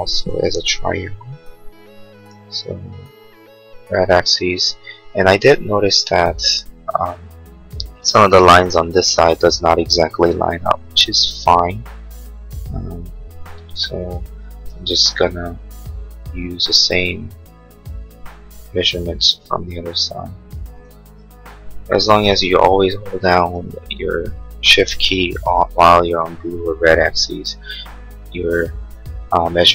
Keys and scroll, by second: 0.7 l, 24.9 p.